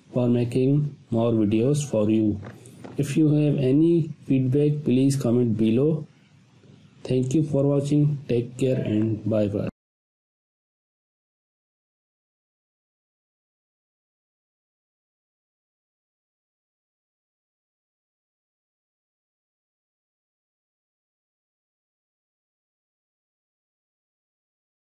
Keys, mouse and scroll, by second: 0.2 ctrl+y, 1.2 click, 1.5 space, 1.7-2.3 ctrl+drag, 7.8 scroll up 1, 8.0 space, 8.2-10.6 ctrl+click, 10.0 ctrl+alt+click, 11.5 scroll down 1, 11.9 click, 17.8 click, 18.0 space, 18.4-18.8 click, 18.5 space, 23.2-24.8 drag.